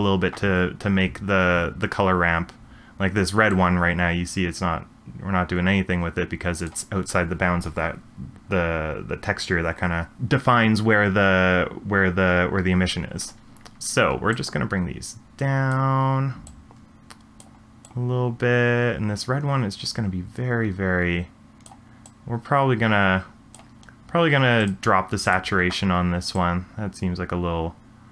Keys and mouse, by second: 3.5-6.7 drag, 14.5-15.7 drag, 16.4-17.4 drag, 17.8-21.7 drag, 22.0-23.5 drag, 25.3 click.